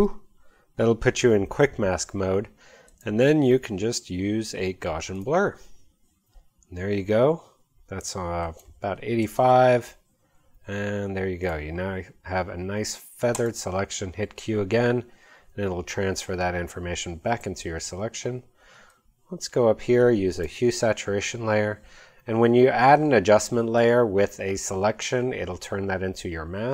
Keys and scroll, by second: 9.0-9.9 typing, 14.1 q.